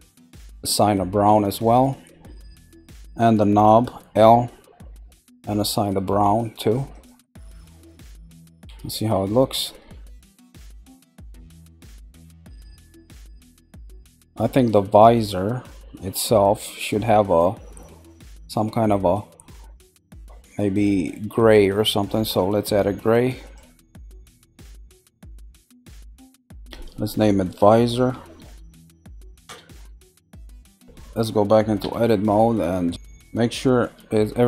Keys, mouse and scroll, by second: 1.7 click, 6.9 click, 8.4 Tab, 9.1-10.5 middle drag, 10.5-11.4 scroll up 2, 11.4 scroll up 1, 11.6-12.6 shift+middle drag, 12.6-13.0 scroll up 2, 16.7-23.4 middle drag, 23.4 click, 24.9 click, 25.8 click, 26.0-29.0 drag, 30.9-31.3 scroll down 1, 31.8 Tab.